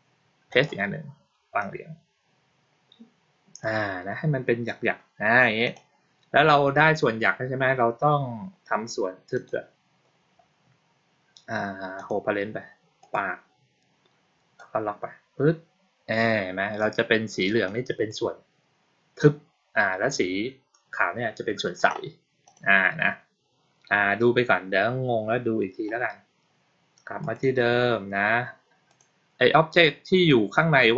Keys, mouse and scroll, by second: 0.4 click, 1.5-3.5 drag, 5.5 click, 9.2 click, 11.8 click, 12.9 click, 14.4-16.7 drag, 17.5 click, 22.3 click, 27.1 click, 28.8 click.